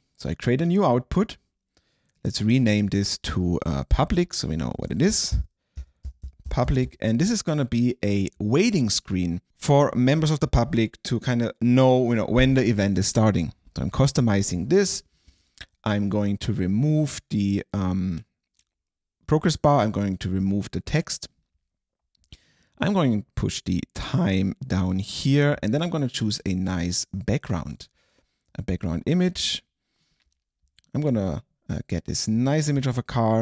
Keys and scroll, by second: 4.9 super+a, 5.6-7.4 typing.